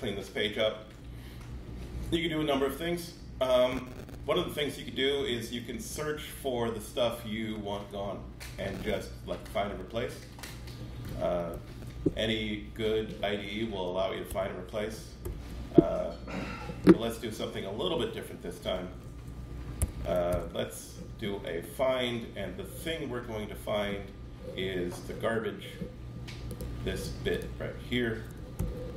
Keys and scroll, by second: 11.5 shift+super+r, 14.3 Escape, 15.2 super+r, 19.8 Escape, 20.3 super+f, 28.6 super+c.